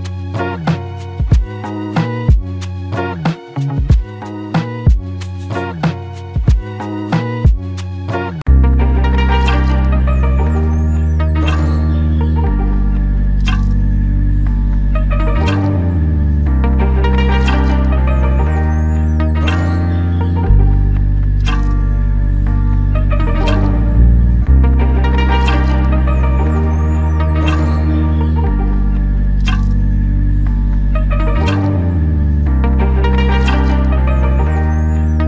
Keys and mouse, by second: 1.7 f, 3.4 double click, 5.0 shift+click, 6.9 double click, 13.4 ctrl+alt+click, 14.6 shift+click, 16.3 double click, 17.8 f, 20.5 double click, 24.9 alt+click, 27.4 double click, 30.0 alt+click, 31.8 double click, 34.2 shift+click.